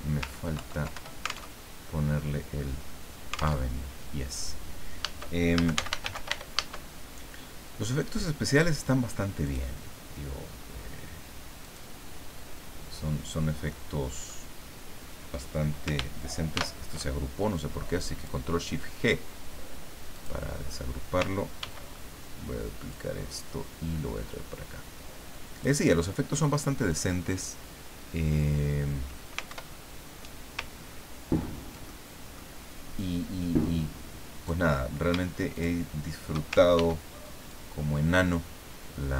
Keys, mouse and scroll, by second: 0.5 ctrl+End, 0.9 ctrl+Return, 1.5 ctrl+alt+Tab, 3.6 alt+Tab, 5.3-6.8 typing, 9.4 click, 11.6 click, 13.7 middle click, 16.5 ctrl+shift+g, 18.2 click, 20.1 click, 21.6 ctrl+d, 22.9-25.8 ctrl+drag, 26.0-26.4 ctrl+scroll up 2, 29.5 ctrl+alt+Up, 30.9-31.5 ctrl+scroll down 4, 31.8 ctrl+middle click, 33.0-34.6 drag, 35.5 shift+click, 36.7 ctrl+shift+d, 37.4-39.1 ctrl+drag.